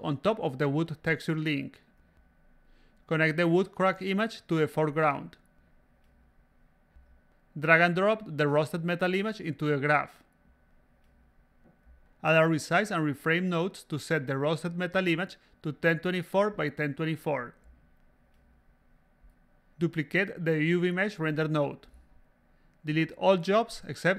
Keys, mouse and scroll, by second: 0.5-2.1 drag, 3.2-4.7 drag, 5.2 a, 5.4 click, 6.2 click, 7.3 click, 8.2-9.9 drag, 10.7 click, 11.9 click, 13.0 click, 14.0 click, 14.7 1, 15.0 2, 16.6 click, 17.9 click, 18.6 click, 18.7-20.5 typing, 20.3 click, 20.7-21.7 drag, 22.3 click, 23.0 click, 23.5 click, 24.0-24.1 drag.